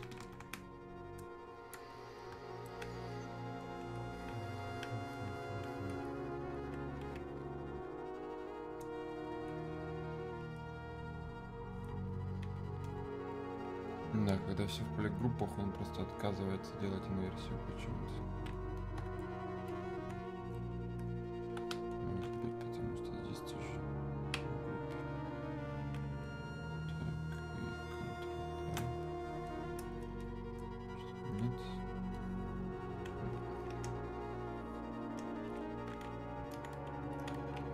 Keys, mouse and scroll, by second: 1.9-6.1 drag, 6.6-10.9 alt+drag, 12.6-29.5 alt+drag, 29.5-32.2 drag, 32.2-37.7 ctrl+drag.